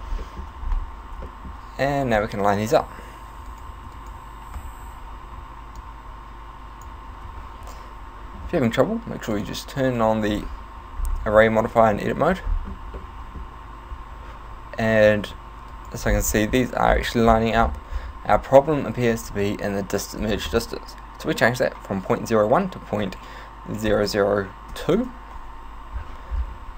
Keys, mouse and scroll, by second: 0.3 shift+middle click, 0.7-1.1 scroll up 3, 1.3 shift+middle click, 1.9 right click, 2.9 g, 3.7 right click, 4.0 shift+right click, 4.9 ,, 5.8 click, 7.3 ctrl+z, 9.4 click, 11.0 scroll up 5, 12.5 scroll up 4, 13.0 shift+middle click, 13.5 scroll up 1, 15.7 right click, 16.1 scroll up 6, 16.9-18.5 scroll down 15, 20.3 click, 26.3-26.7 scroll down 10.